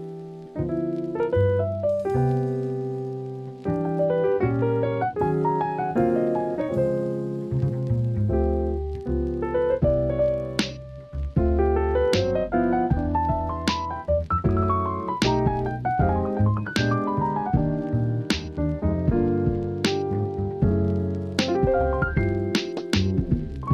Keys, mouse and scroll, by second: 0.9 scroll down 1, 1.7 scroll up 1, 2.8 click, 4.3 scroll up 1, 4.5 scroll down 1, 4.7-5.2 right drag, 5.8 click, 6.3 middle click, 7.8 KP_1, 8.8-9.1 shift+middle drag, 9.6 shift+middle drag, 9.8 alt+z, 10.3 shift+a, 12.7 s, 17.2 shift+middle click, 17.9 shift+middle click, 18.6 s, 19.0-20.3 drag, 20.9 click, 21.7 Tab.